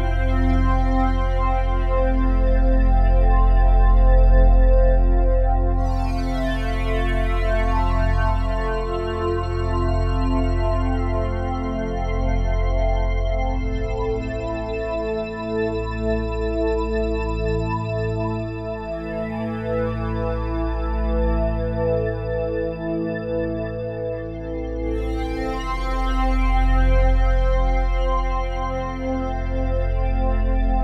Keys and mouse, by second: 0.6 s, 1.5 0, 2.3 Return, 2.8-3.7 typing, 3.2 click, 5.0 typing, 5.9 click, 6.3-8.3 typing, 8.5-10.3 drag, 11.1-13.1 typing, 11.7 click, 13.2 shift+click, 13.5 shift+click, 14.0 shift+click, 14.3 shift+click, 14.8 shift+click, 15.2 shift+click, 15.6 shift+click, 16.0 shift+click, 17.0 typing, 18.3 shift+click, 18.6-19.4 typing, 21.3-22.7 typing, 25.2-26.4 shift+drag, 25.6-29.4 typing, 28.4 click, 30.5-30.8 typing.